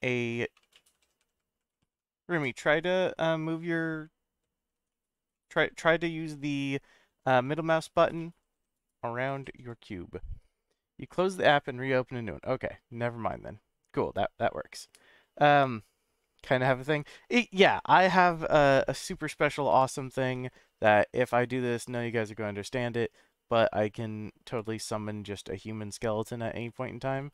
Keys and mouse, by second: 0.5-1.2 middle drag, 5.3-7.0 middle drag, 7.4-7.9 middle drag, 8.3-9.8 middle drag, 19.7 shift+a, 25.2-25.7 middle drag, 26.6 s.